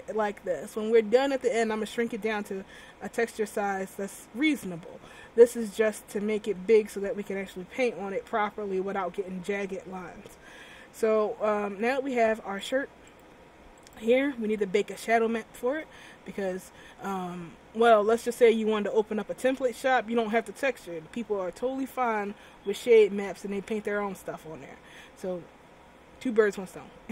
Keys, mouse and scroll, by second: 3.6-4.2 scroll down 1, 4.2-8.6 scroll down 8, 12.7 click, 13.9 right click.